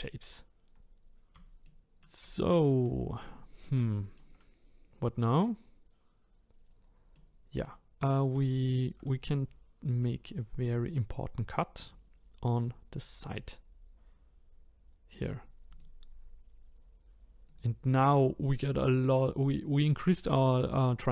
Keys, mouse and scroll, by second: 0.8 scroll up 2, 1.6 shift+middle click, 2.4-3.0 scroll up 3, 3.0 shift+middle click, 6.6-7.1 scroll down 1, 7.1-9.2 middle drag, 9.2-9.8 scroll down 1, 9.8 scroll down 1, 10.0-11.8 middle drag, 11.8-14.9 drag, 15.7-20.5 drag.